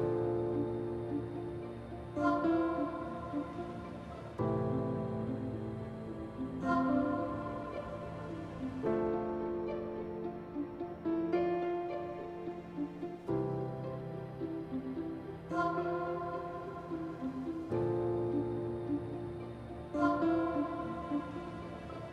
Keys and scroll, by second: 4.1 p, 14.0 shift+s, 16.7 s.